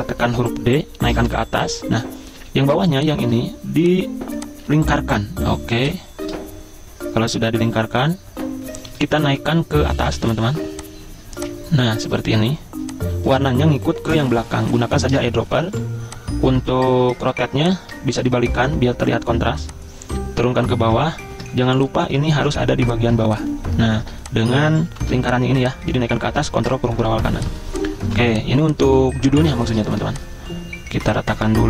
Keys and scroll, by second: 0.4 d, 1.3 ctrl+shift+], 2.4 a, 5.6 z, 9.3 v, 10.1 v, 10.5 v, 14.1 i, 15.1 v, 15.7 g, 18.5 v, 21.2 ctrl+x, 21.6 v, 22.4 ctrl+f, 23.2 z, 25.0 v, 26.7 ctrl+shift+], 27.2 z, 28.1 v.